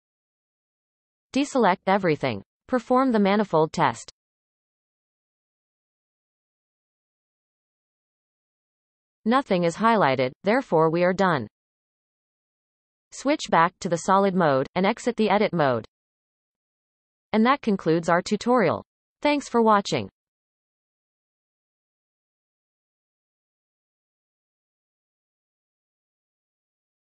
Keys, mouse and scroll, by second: 2.6 alt+a, 5.0-8.1 drag, 9.2-11.6 middle drag, 11.6 z, 13.7 Tab, 14.2-20.4 middle drag, 20.7-27.1 shift+middle drag.